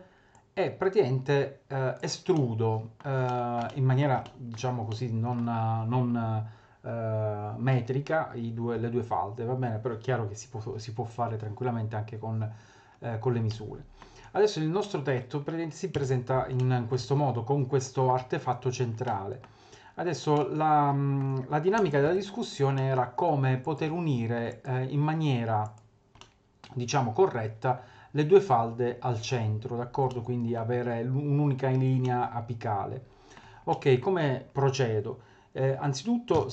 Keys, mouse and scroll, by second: 0.3 click, 2.4 middle click, 3.3 shift+middle click, 3.7 middle click, 4.2 shift+middle click, 4.7 scroll up 1, 4.9 middle click, 13.5 middle click, 14.3-14.7 scroll up 1, 14.8 shift+middle click, 15.9 Tab, 16.6 middle click, 17.0 Tab, 19.1 middle click, 19.9 scroll up 1, 20.3 middle click, 21.8 middle click, 22.1 2, 22.7 middle click, 23.6 click, 24.5 click, 25.6 click, 26.2 middle click, 30.1 middle click, 32.0 middle click, 33.0 middle click, 33.7 middle click, 36.3 3.